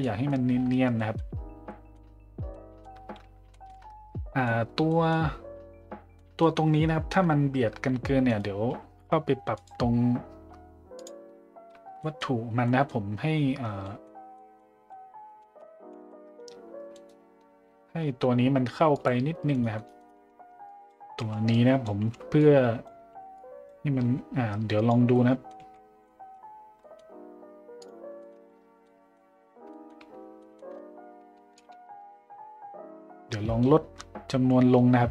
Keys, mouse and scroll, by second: 0.0 middle drag, 0.9 middle drag, 1.7 middle drag, 2.5-2.8 middle drag, 3.5 middle drag, 4.9 middle drag, 6.1 middle drag, 9.6 drag, 10.9 click, 11.7 Tab, 12.0 middle click, 12.6 middle drag, 13.8 middle click, 14.3 middle drag, 18.9 click, 20.7 b, 21.2 b, 22.0 b, 25.1 middle click, 26.0 z, 26.1 middle click, 26.8 Tab, 26.8 middle click, 27.8 click, 28.2 middle click, 28.8-29.1 middle drag, 29.7 middle drag, 30.5 middle click, 31.6-35.1 shift+drag.